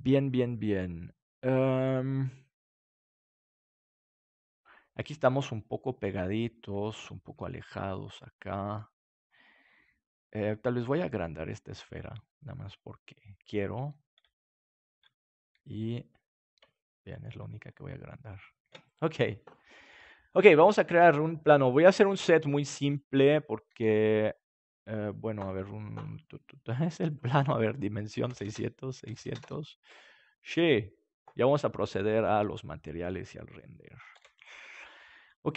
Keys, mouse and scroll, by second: 2.3-5.6 middle drag, 9.0-10.1 right drag, 10.9 s, 13.6 click, 14.4-17.1 middle drag, 17.6 middle click, 18.6 ctrl+s, 21.0-22.7 drag, 22.9-24.8 drag, 23.8 s, 27.6-30.0 drag, 28.4 KP_0, 29.2 KP_0, 29.8 KP_3, 34.1 ctrl+s.